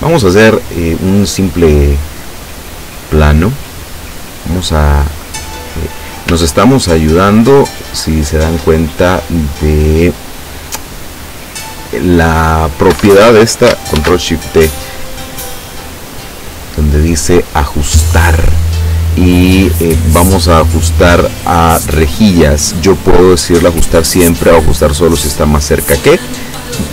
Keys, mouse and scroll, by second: 0.2 click, 3.7 click, 6.6 ctrl+scroll up 2, 7.8 ctrl+scroll down 2, 13.1 Escape, 14.2 ctrl+shift+d, 16.1 click, 17.9 click.